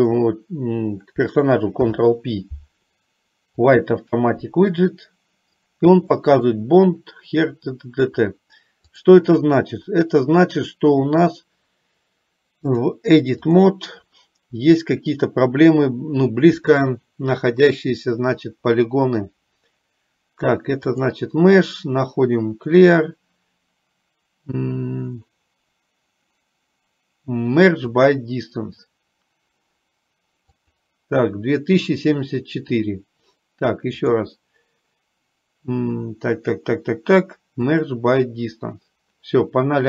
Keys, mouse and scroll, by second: 1.9 ctrl+p, 6.4 middle click, 9.0 click, 12.9-14.0 drag, 21.0 click, 30.6 click, 34.3-38.0 drag.